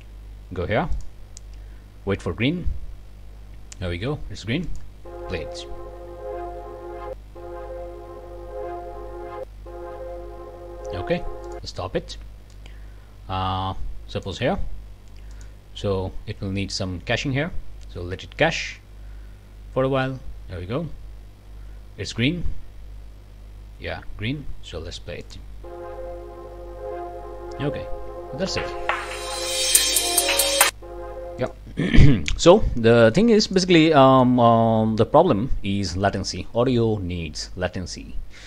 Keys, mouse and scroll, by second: 0.9 click, 4.6 click, 11.5 click, 12.5-14.4 ctrl+drag, 15.3 click, 25.2 click, 31.4 click, 32.1 click, 32.8 scroll down 2, 33.1 click, 33.9 click.